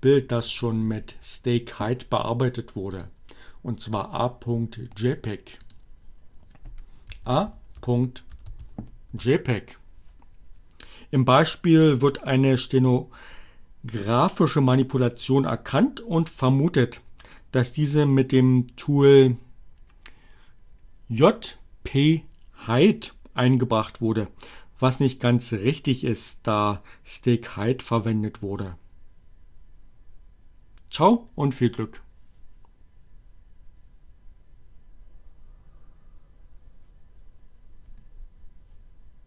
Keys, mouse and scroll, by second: 0.3-1.7 drag, 4.1 click, 4.8-6.0 typing, 7.5 Return.